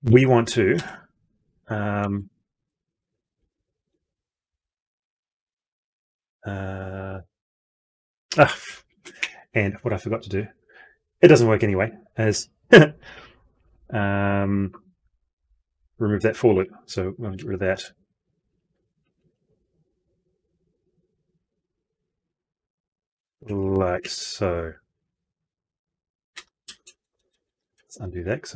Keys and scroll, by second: 2.9 ctrl+x, 3.8 ctrl+v, 5.4 ctrl+z, 17.1 ctrl+y, 26.3 ctrl+z.